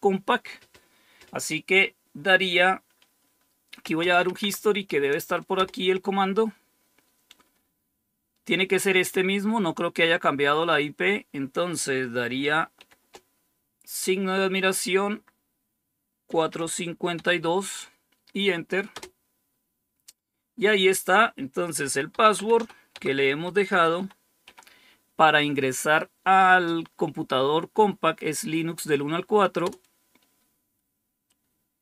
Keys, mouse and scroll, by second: 3.5-4.5 typing, 5.4 Return, 12.7 shift+1, 15.9-17.0 typing, 18.8 Return, 21.5-24.8 typing, 29.5 Return.